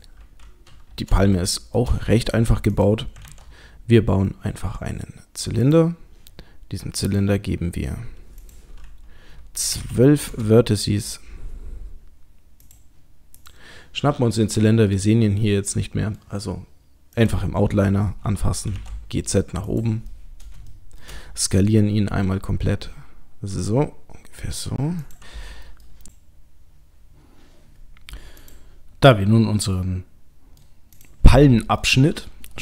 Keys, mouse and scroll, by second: 0.3-1.2 scroll down 1, 1.3 shift+middle click, 2.7 click, 3.3 shift+a, 7.1 click, 8.4 click, 12.6 click, 13.4 click, 15.0 middle click, 17.2 click, 18.7 g, 20.1 middle click, 20.4 middle click, 20.7 shift+middle click, 22.0 s, 25.7 middle click, 28.4 click, 29.2 middle click, 31.0 click, 31.8 middle click.